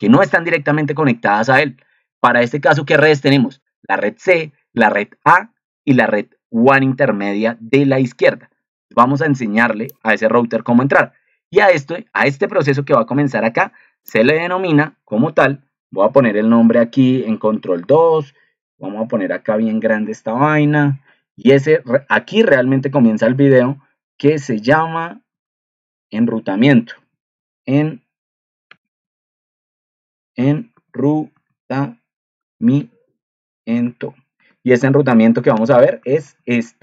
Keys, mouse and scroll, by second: 17.0 ctrl+2.